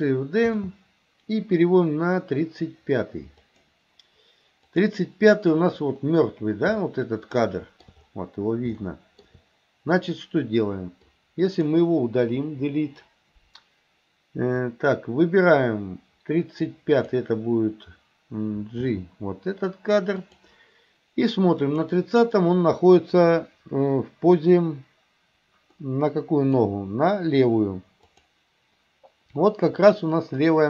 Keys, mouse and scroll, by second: 0.6 shift+d, 4.8 click, 6.9-7.8 shift+middle drag, 8.9 shift+middle click, 11.0-11.7 drag, 12.5 Delete, 16.7-17.1 drag, 18.9 g, 21.7 click, 25.8 middle click, 28.2 click.